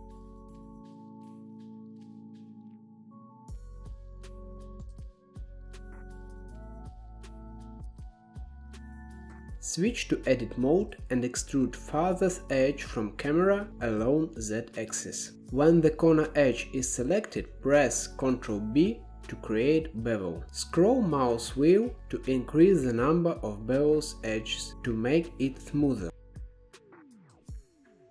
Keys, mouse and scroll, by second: 0.1 s, 1.1 KP_0, 1.9-2.5 drag, 4.8 click, 5.1-6.6 shift+middle drag, 8.2 click, 9.0 click, 9.3-9.8 middle drag, 9.8-10.1 scroll down 2, 10.1-10.9 middle drag, 10.9 Tab, 11.3-12.5 shift+middle drag, 12.5 2, 12.7 click, 13.8 e, 17.3 click, 18.5 ctrl+b, 22.9 click, 23.8 Tab, 24.5-25.7 right drag, 25.7-26.6 middle drag, 26.6 KP_0, 27.4-28.1 shift+middle drag.